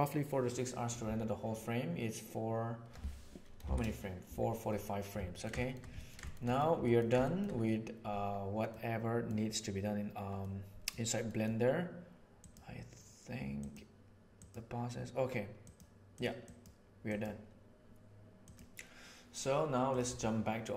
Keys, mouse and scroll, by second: 3.6 shift+Right, 5.3 middle click, 5.5 middle click, 5.9 middle click, 6.2 shift+middle click, 6.4 middle click, 6.7 ctrl+middle click, 7.1 shift+middle click, 8.6 middle click, 10.4 middle click, 11.2 middle click, 12.3 click, 13.5 click, 14.3 click, 15.5 click, 16.1 click, 16.3 click, 17.0 drag, 18.4 click.